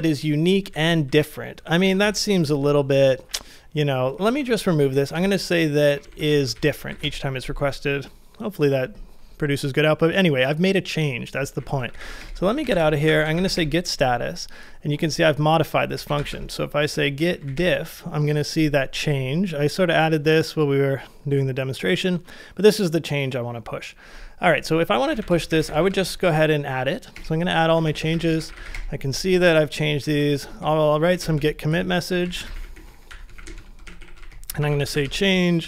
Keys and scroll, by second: 0.0-2.0 typing, 3.8-6.8 typing, 6.9 ctrl+c, 7.0 Return, 11.5-13.2 typing, 15.7-18.0 typing, 24.8-26.2 typing, 27.2 Return, 27.5-30.9 typing, 32.4 typing, 35.4-35.6 typing.